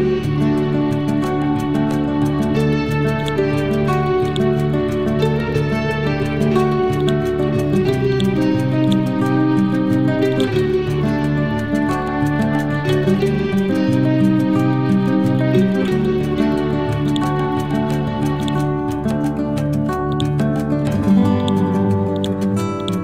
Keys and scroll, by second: 6.0 ctrl+u, 10.8-14.5 typing, 15.7 shift+1.